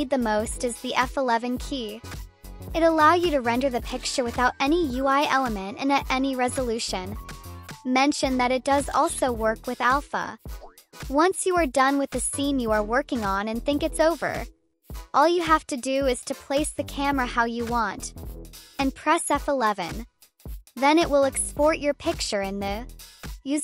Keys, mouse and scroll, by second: 0.9 2, 3.2 F11, 5.4 click, 5.4 click, 6.1 drag, 7.7 click, 8.8 F11, 9.3 click, 9.4 click, 9.9 click, 10.2 click, 10.9 click, 11.4 1, 13.6 click, 14.7 F11, 19.0 click, 19.0 click, 20.5-22.1 drag.